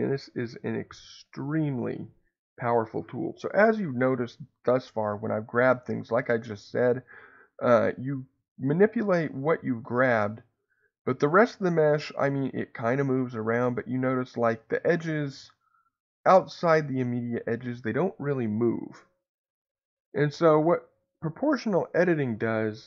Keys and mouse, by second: 19.9 Escape.